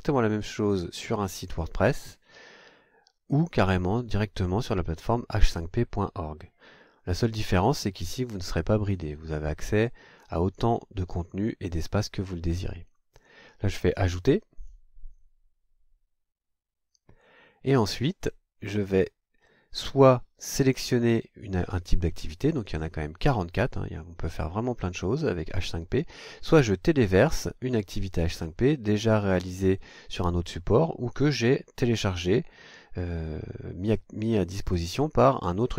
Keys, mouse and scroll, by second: 14.6 click, 18.5-19.7 scroll down 4.